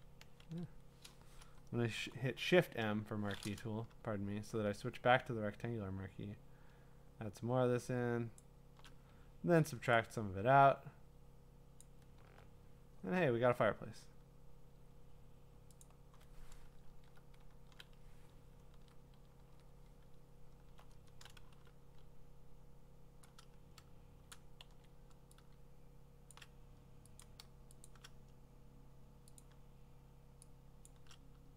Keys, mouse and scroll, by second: 0.4 ctrl+z, 2.0 shift+m, 8.4 shift+click, 11.8 alt+click, 15.8 click, 16.4 click, 16.9 alt+BackSpace, 17.5 ctrl+BackSpace, 19.4 ctrl+d, 20.2 scroll, 21.5 b, 24.3 shift+click, 24.7 x, 26.3 shift+click, 27.2 click, 27.9 shift+click, 29.4 click, 30.9 shift+click.